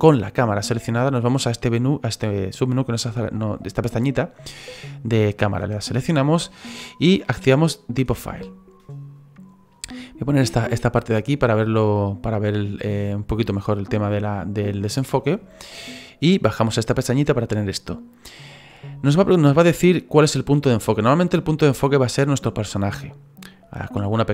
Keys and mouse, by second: 5.4 click, 7.9 click, 10.9 click, 16.5 click.